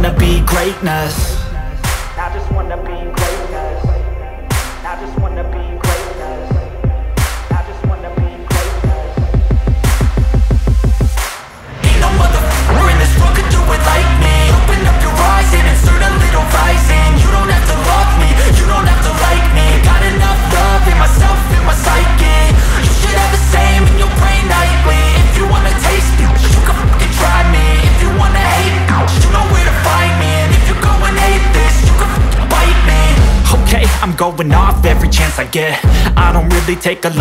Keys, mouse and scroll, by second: 0.7 scroll down 1, 3.5 click, 3.9-4.5 scroll down 1, 4.8 scroll up 1, 6.3 click, 8.4 scroll up 1, 8.6 click, 9.4 scroll down 1, 9.9 scroll up 1, 10.1 click, 10.2 scroll down 1, 10.5 click, 12.2 click, 13.9 scroll down 1, 14.0 scroll up 1, 14.1 click, 14.8 click, 17.0 scroll down 1, 17.2 click, 17.9 scroll down 1, 17.9 scroll up 1, 18.1 click, 18.5 scroll down 1, 18.6 scroll up 1, 18.7 click, 19.3 scroll down 1, 19.9 scroll down 1, 20.0 scroll up 1, 20.2 click, 21.0-21.5 scroll down 2, 21.3 click, 21.5 click, 21.6 scroll up 1, 21.9 click, 22.7 scroll down 1, 22.7 scroll up 1, 23.2 click, 23.7 scroll down 1, 23.8 scroll up 1, 23.9 click, 24.9-25.6 scroll down 2, 25.1 click, 25.6 click, 26.6-27.0 scroll down 1, 27.0-27.8 scroll up 1, 27.8-28.9 scroll down 1, 28.9-30.5 drag, 31.2-32.1 scroll up 1, 32.1-37.2 drag.